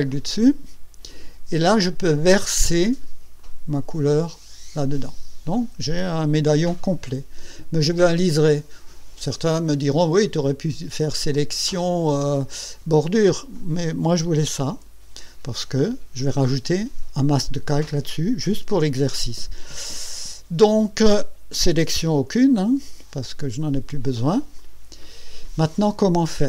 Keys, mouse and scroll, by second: 0.1 click, 3.4 click, 11.3 click, 14.7 Escape, 23.6 click, 24.6 click.